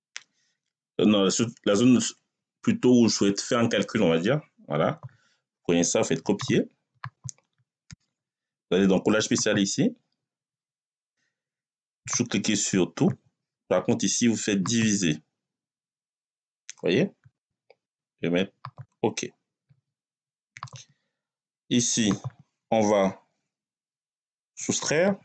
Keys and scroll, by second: 24.7-25.2 typing.